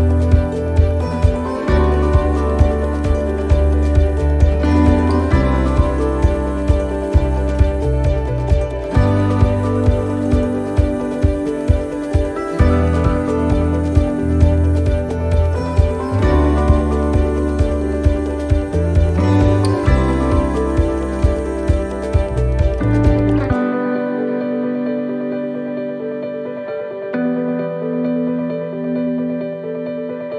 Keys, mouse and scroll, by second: 0.3 right click, 0.8 alt+shift+right click, 1.7 right click, 2.2 shift+right click, 2.6 alt+shift+right click, 3.3 alt+shift+right click, 4.6 shift+right click, 4.9 shift+right click, 5.9 shift+right click, 5.9 middle click, 6.2 scroll down 1, 7.2 click, 11.7 right click, 13.1 c, 15.5 middle click, 16.2 c, 18.2 click, 21.0 middle click, 21.9 right click, 22.2 c, 24.6 middle click, 25.0 c, 26.6 middle click, 27.9 click.